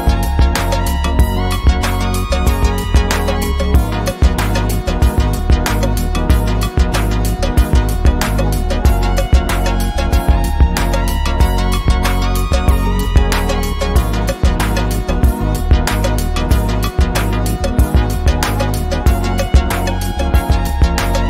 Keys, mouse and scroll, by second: 0.9 shift+scroll down 1, 1.7 ctrl+scroll down 1, 1.8 ctrl+scroll up 1, 2.1 ctrl+scroll down 1, 2.6-4.9 drag, 6.1-8.9 drag, 12.3 r, 12.8 r, 13.8-15.9 drag.